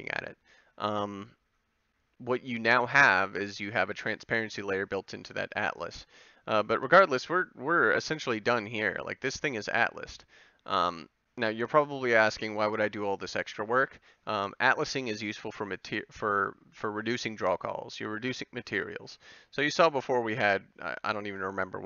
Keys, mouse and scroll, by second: 5.4-8.9 drag, 8.9 middle click.